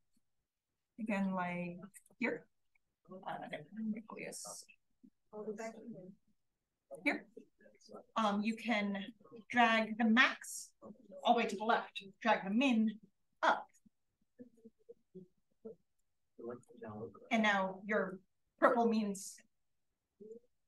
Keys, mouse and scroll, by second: 3.5-4.2 scroll up 1, 7.0 click, 9.0-10.6 drag, 12.4-16.5 drag.